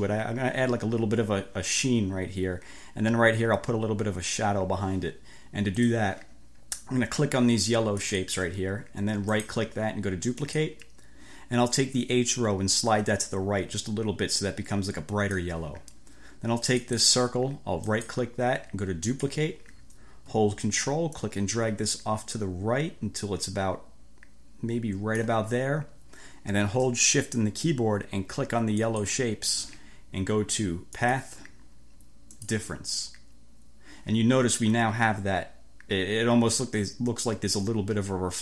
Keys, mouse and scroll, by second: 5.8 click, 8.1 click, 9.3 right click, 10.5 click, 12.8 click, 16.9 click, 17.9 right click, 19.1 click, 21.3-25.5 ctrl+drag, 25.3 ctrl+scroll up 1, 28.9 shift+click, 31.1 click, 32.4 click.